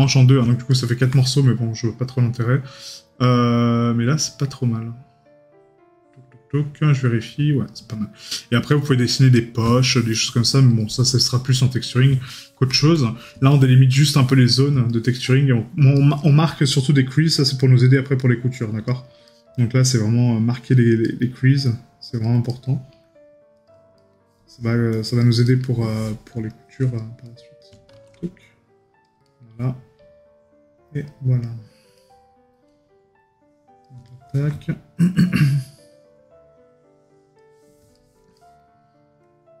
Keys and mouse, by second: 0.8 right click, 9.9 right click, 12.4 right click, 15.0 right click, 19.3 right click, 21.1 right click, 22.6 right click, 24.0 right click, 25.5 right click, 27.3 right click, 29.3 right click, 31.5 right click, 34.1 right click.